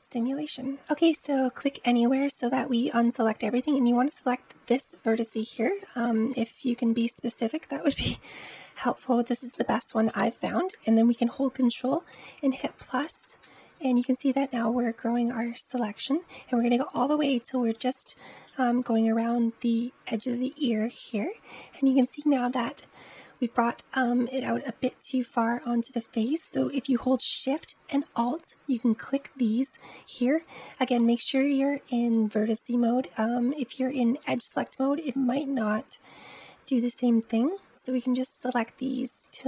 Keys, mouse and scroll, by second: 0.7 click, 1.1-2.7 middle drag, 2.7-3.5 scroll up 1, 4.7 click, 5.3-12.0 middle drag, 12.0 ctrl+KP_Add, 12.4 ctrl+KP_Add, 12.7 ctrl+KP_Add, 12.9 ctrl+KP_Add, 13.1 ctrl+KP_Add, 13.3 ctrl+KP_Add, 13.7 ctrl+KP_Add, 14.0 ctrl+KP_Add, 14.5 ctrl+KP_Add, 15.0 ctrl+KP_Add, 15.9 ctrl+KP_Add, 17.3 scroll up 2, 17.9-20.8 middle drag, 21.9-24.8 middle drag, 28.8 alt+shift+click, 30.1 alt+shift+click, 37.7 alt+shift+click, 39.2-39.4 middle drag.